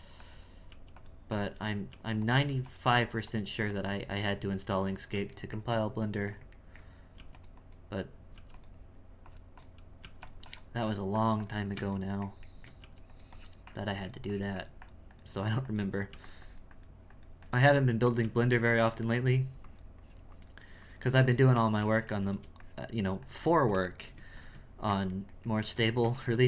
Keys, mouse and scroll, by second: 1.3 click, 2.4 f, 2.9-5.4 drag, 5.4-7.1 shift+middle drag, 7.6 click, 9.2 click, 10.4-12.0 drag, 12.0 shift+middle click, 13.3-16.1 drag, 16.4-18.2 drag, 18.6-23.9 drag, 23.9 shift+middle click, 24.4 Tab, 25.1-26.4 ctrl+middle drag.